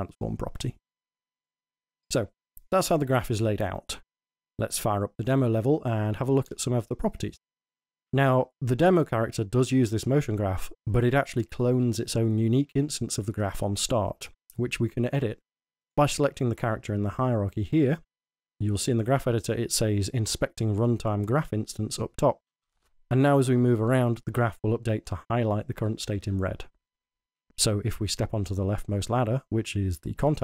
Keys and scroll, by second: 7.8-8.6 typing, 23.4-24.3 typing, 25.3 w, 26.2 w, 27.5 d, 28.1 w.